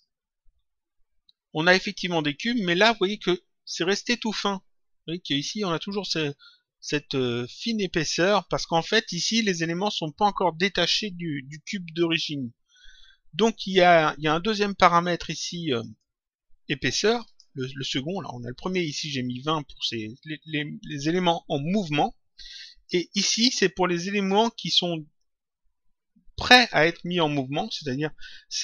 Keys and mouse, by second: 15.4 click, 17.2 click, 18.5 click, 24.1 click.